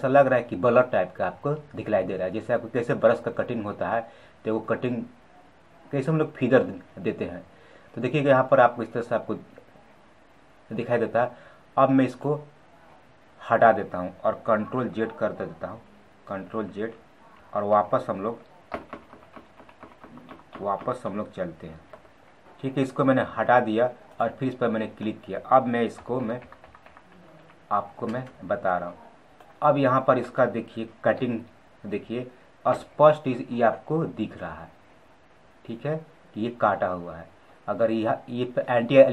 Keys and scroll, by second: 14.7 ctrl+z.